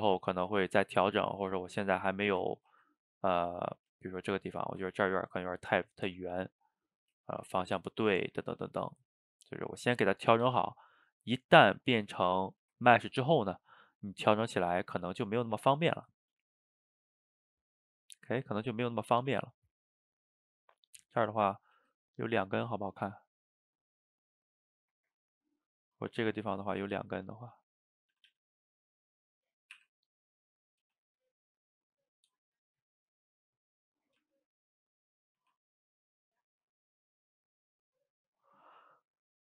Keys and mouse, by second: 1.8-2.3 middle drag, 2.3 shift+right click, 2.5-3.2 ctrl+middle drag, 3.2 click, 3.6-4.7 ctrl+middle drag, 4.7 shift+right click, 4.9-6.1 ctrl+middle drag, 6.1 Tab, 6.9 click, 7.3 shift+click, 7.6-8.1 middle drag, 8.1 ctrl+t, 10.5 g, 11.7-12.1 ctrl+middle drag, 12.1 Tab, 12.4 a, 12.5 a, 12.8-17.3 ctrl+middle drag, 21.2 click, 21.3-21.8 middle drag, 21.8 shift+d, 23.3-25.4 middle drag, 25.4 ctrl+z, 26.1 click, 26.8 shift+d, 28.2 a, 28.3 a, 29.0 drag, 29.3-29.8 middle drag, 29.8 r, 30.9 g, 31.4-32.2 middle drag, 32.2 g, 33.2-34.3 middle drag, 34.3 g, 35.4 r, 36.7-39.4 middle drag.